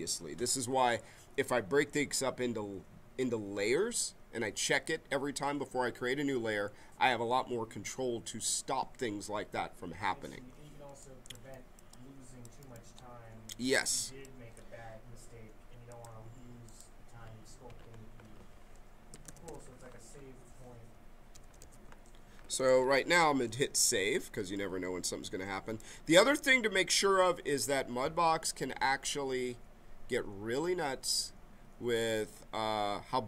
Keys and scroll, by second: 18.9-19.9 typing, 21.0-22.4 typing, 22.5 Return.